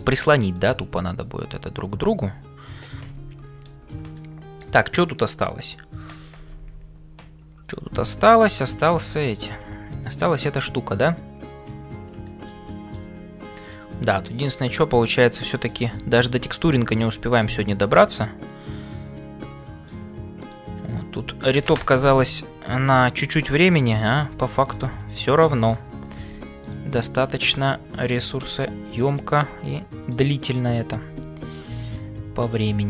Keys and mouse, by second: 0.0-32.8 typing, 0.5-3.8 middle drag, 4.1 shift+middle click, 9.1 shift+middle click, 12.2 shift+middle click, 12.7 middle click, 15.5 shift+middle click, 15.9-20.0 middle drag, 20.9 middle click, 23.6 middle click, 24.7 click, 25.1 middle click, 28.1 click, 29.5 middle click, 30.5 click, 31.9 middle click.